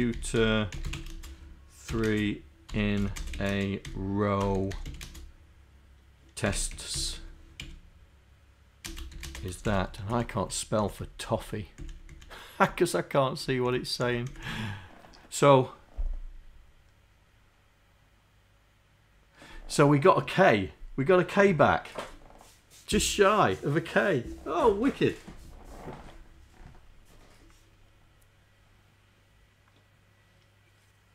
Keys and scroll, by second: 0.0-2.2 typing, 3.4-9.3 typing, 9.7 shift+Insert, 10.2 Up, 10.5 Up, 10.8 Down, 11.2 Down, 11.8 Up, 12.2 Up, 12.8 Down, 14.1 Down, 14.3 Down.